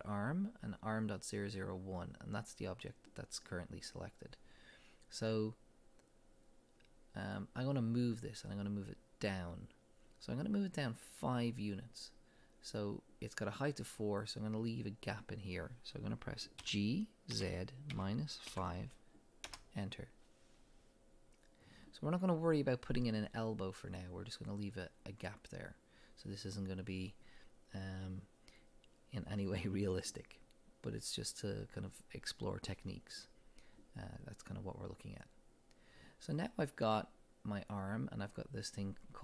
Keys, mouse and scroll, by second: 2.8-15.2 drag, 16.6 g, 19.5 Return, 36.8-37.2 scroll down 2.